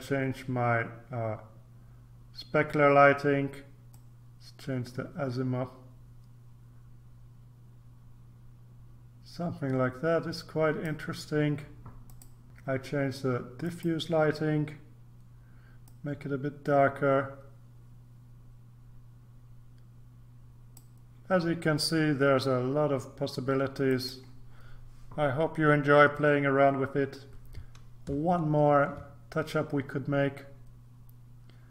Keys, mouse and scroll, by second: 3.9-11.4 drag, 12.1 click, 12.4-13.0 scroll up 1, 13.6 click, 15.8-21.3 drag, 23.8 click, 28.3-28.9 ctrl+scroll down 2, 29.9-30.7 scroll up 3.